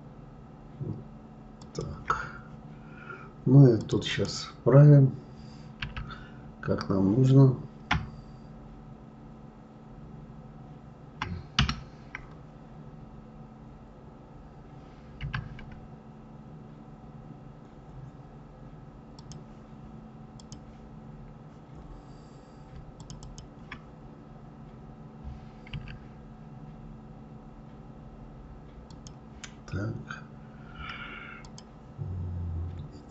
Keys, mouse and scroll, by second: 3.8 click, 4.0 click, 5.8 s, 20.4 click, 23.0 shift+click, 23.2 shift+click, 25.8 s, 31.4 click, 33.0 click.